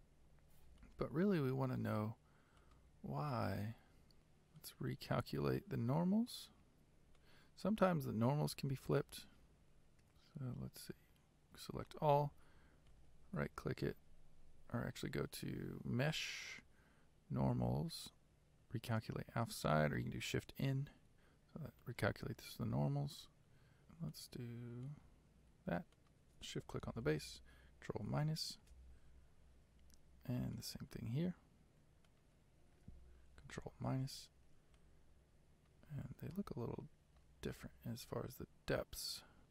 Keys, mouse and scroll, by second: 0.3-0.9 scroll down 4, 0.9-2.7 shift+middle drag, 2.7 click, 3.4 middle click, 4.2 Tab, 7.2 click, 8.0-11.8 middle drag, 11.8 a, 21.1 Tab, 21.9 middle click, 22.6 Tab, 23.8 click, 24.2 click, 26.1 shift+click, 28.0 ctrl+KP_Subtract, 30.6 click, 33.8 ctrl+KP_Subtract, 34.9-35.9 middle drag, 35.9-36.4 scroll up 3, 36.4-39.5 shift+middle drag.